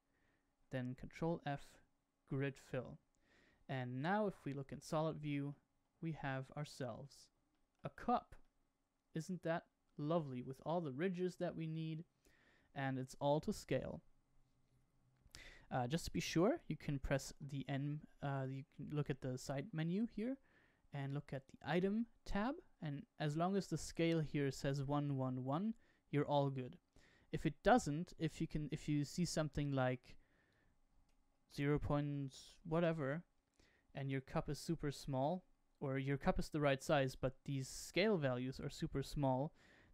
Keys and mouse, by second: 1.1 ctrl+f, 3.9 click, 4.4-5.4 middle drag, 6.2 Tab, 6.6 middle click, 7.4-7.7 shift+middle drag, 8.4-10.2 middle drag, 11.1-12.4 middle drag, 13.3-13.6 shift+middle drag, 17.2 n, 29.9-33.5 drag, 34.4-35.1 shift+middle drag.